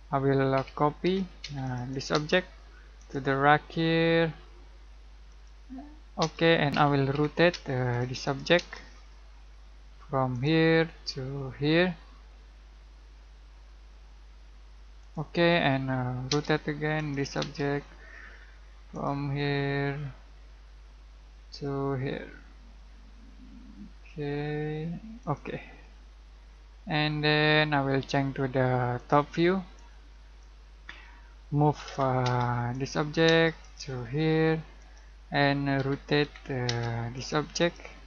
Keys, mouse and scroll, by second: 0.5-2.1 typing, 1.6 click, 2.3 scroll down 1, 2.5 middle click, 2.9 click, 5.2 click, 6.2 space, 6.7 r, 7.5 space, 7.9 click, 8.5 space, 8.8-9.9 scroll up 1, 10.3 click, 15.0 click, 15.4 middle click, 16.2 space, 16.5-16.9 scroll up 1, 16.9 click, 17.4 space, 17.7-18.9 scroll up 1, 18.9 click, 19.4 scroll down 1, 25.2 click, 25.7-27.1 scroll up 1, 28.9-31.8 drag, 31.8 m, 32.2 space, 32.7 click, 33.2 space, 33.6 click, 35.5-36.7 typing, 37.1 click.